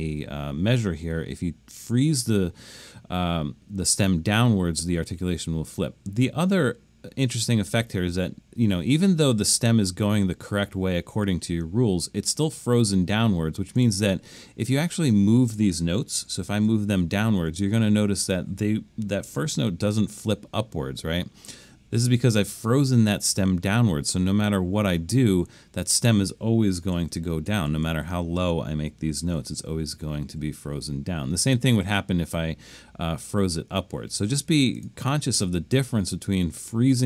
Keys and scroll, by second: 16.2-17.4 typing, 19.3 7, 27.0-30.3 typing.